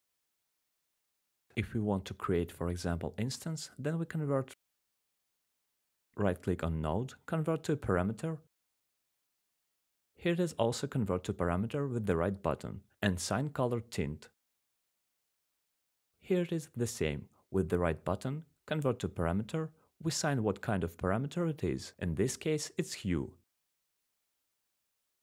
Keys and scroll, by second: 4.1-9.8 typing, 11.7-13.6 typing, 13.8 Return, 18.5-20.2 typing, 20.7 Return.